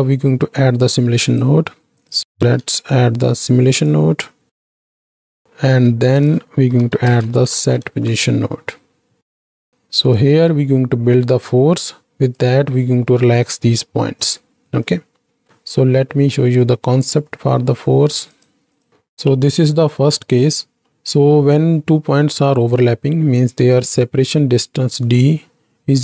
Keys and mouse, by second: 2.3 shift+a, 5.2 shift+a, 14.8 middle click, 15.8 n, 16.3 middle click, 17.1 middle click, 18.3 click, 18.7 click, 18.9 ctrl+space, 20.8 middle click.